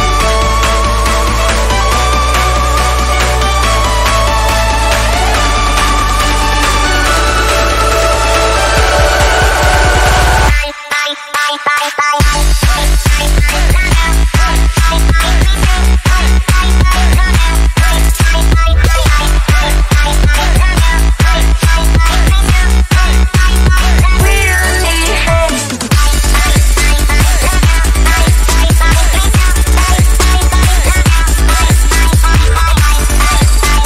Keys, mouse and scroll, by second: 1.6 ctrl+click, 3.2 ctrl+e, 4.0 click, 8.0 right click, 8.7 click, 12.1-21.0 drag, 21.0 right click, 21.7 click, 25.9 ctrl+alt+shift+e, 27.8 click, 30.8 scroll down 1, 31.7-32.8 scroll up 1.